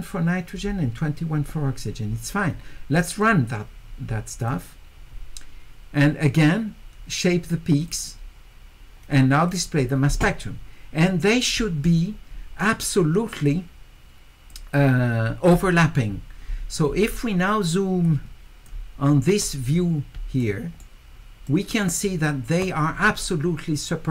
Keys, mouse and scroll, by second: 3.2 click, 4.4 click, 7.8 click, 9.5 click, 13.4-14.5 drag, 18.0 click, 20.4 shift+right click, 21.5 shift+right click.